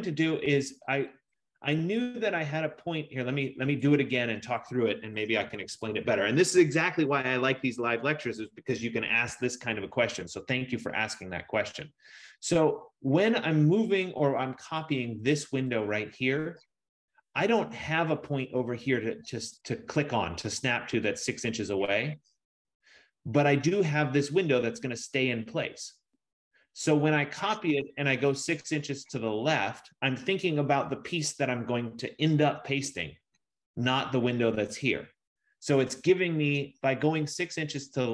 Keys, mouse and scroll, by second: 4.0 click, 5.2-6.4 typing, 5.5 click, 15.0 click, 15.9 click.